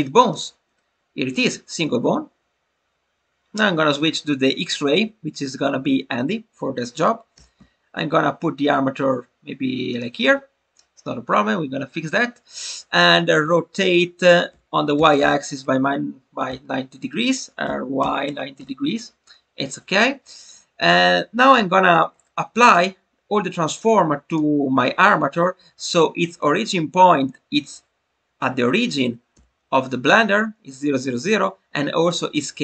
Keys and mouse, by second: 4.0 click, 9.8 click, 18.2 9, 18.3 0, 23.7 drag, 29.3 n.